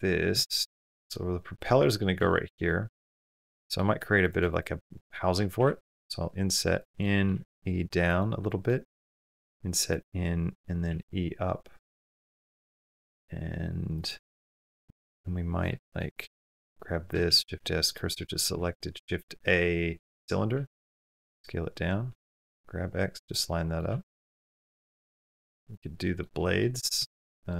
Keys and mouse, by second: 0.2 shift+middle drag, 0.7 middle click, 2.1 shift+middle click, 2.5 middle click, 2.7 Tab, 3.5 shift+middle click, 3.9 3, 4.8 middle click, 5.4 i, 7.0 click, 7.2 e, 8.2 click, 9.2 i, 10.7 e, 14.2 middle click, 14.9 Tab, 17.1 shift+s, 18.0 middle click, 18.3 shift+a, 20.7 s, 21.9 g, 23.7 s, 25.1 Tab, 25.5-26.0 middle drag, 26.4 middle drag, 26.9 shift+middle click.